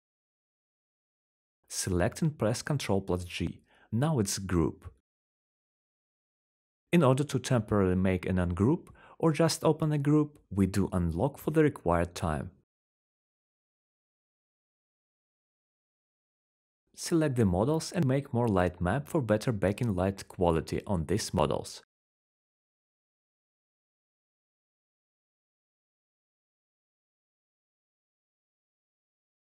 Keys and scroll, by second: 2.6 ctrl+g, 9.6-10.6 typing, 12.1-13.0 typing, 15.2-16.2 typing, 18.1-19.6 typing, 22.6-29.0 typing.